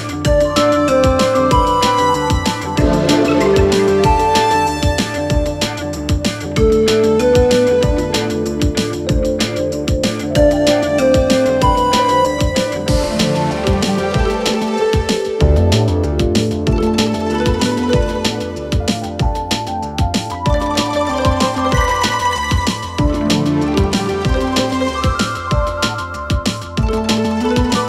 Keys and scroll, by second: 3.8 space, 8.3 space, 13.4 3, 17.0 4, 20.7 space, 23.1 space, 24.5 space.